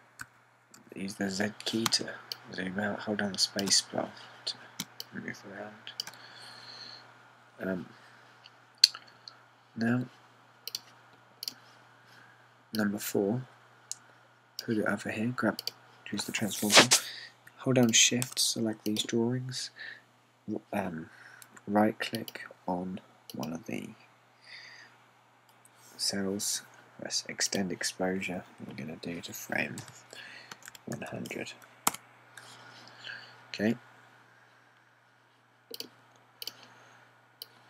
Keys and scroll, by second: 1.3-1.8 typing, 2.9-4.7 typing, 5.9-7.1 typing, 30.9-32.6 typing, 32.9 Return.